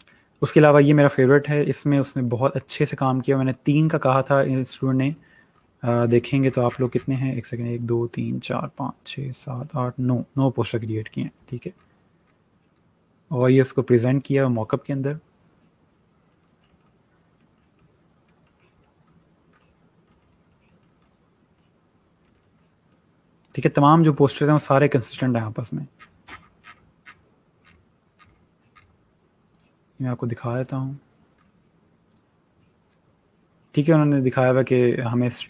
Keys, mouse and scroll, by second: 5.4 scroll down 1, 9.4 scroll, 11.5 scroll down 1, 13.1 scroll, 13.4 scroll up 1, 16.4 scroll down 1, 26.2 scroll up 1, 29.6 click, 31.4 scroll down 1, 32.2 click.